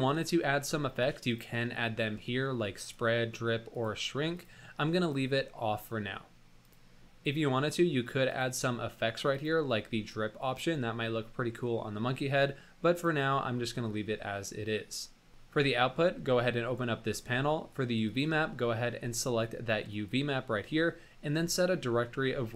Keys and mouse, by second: 0.0 click, 1.3 click, 2.8 drag, 3.7 click, 4.4 click, 5.0 click, 6.6 click, 8.3 click, 9.3 click, 12.9 drag, 18.1-20.2 drag, 22.5 click.